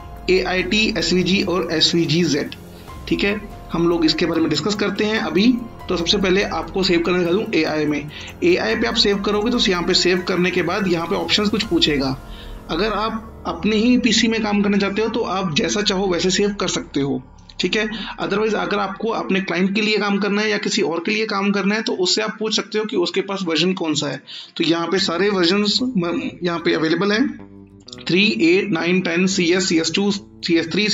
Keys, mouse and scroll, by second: 8.1 click, 24.0 click.